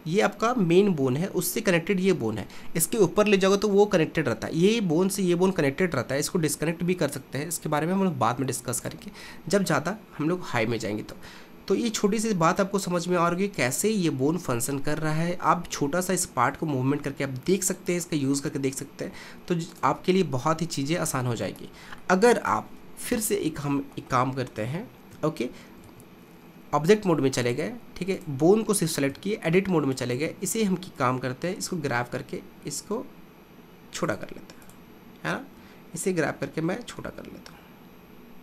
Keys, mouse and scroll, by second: 8.9 click, 9.7-11.7 middle drag, 11.7 r, 14.2-16.1 middle drag, 16.1 r, 18.4-19.9 middle drag, 19.9 click, 20.2 r, 22.1-23.5 middle drag, 23.5 KP_1, 25.9 ctrl+Tab, 27.5 click, 28.1 click, 29.1 Tab, 30.1 click, 31.6 g, 34.7 click, 35.6 g.